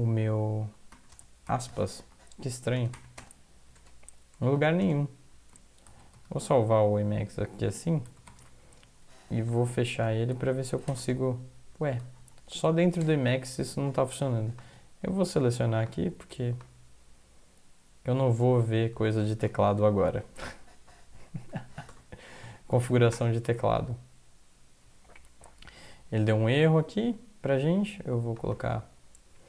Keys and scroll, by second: 1.1 space, 2.0 Up, 2.8 space, 3.2 space, 4.8 space, 5.9 ctrl+x, 6.2 ctrl+s, 8.1 ctrl+x, 8.3 ctrl+s, 9.4 alt+F3, 10.0 alt+F4, 11.0 ', 12.2 shift+Left, 13.0 BackSpace, 19.5 ctrl+c, 20.8 Up, 21.2 Down, 22.6 Up, 23.1 Return.